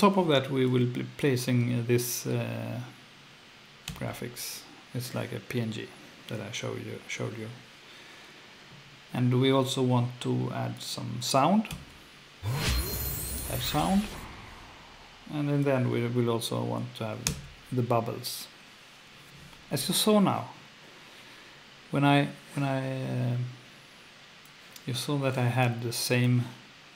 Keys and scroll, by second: 3.9 F2, 11.7 F2, 17.3 F2.